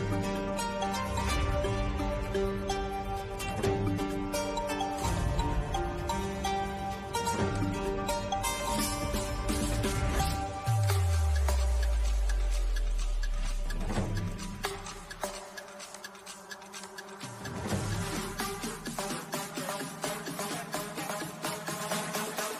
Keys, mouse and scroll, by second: 0.7 Down, 5.0 Down, 6.5-12.5 drag, 12.5 Down, 13.8-22.5 drag.